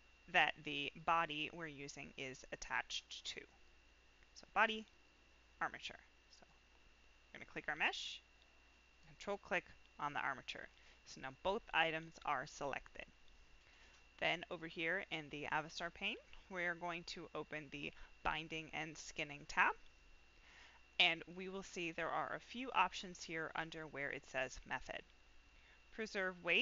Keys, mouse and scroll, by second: 0.7 click, 2.4 click, 3.4 click, 4.9 click, 6.3 click, 9.0 ctrl+click, 17.3 click, 21.1-26.6 drag.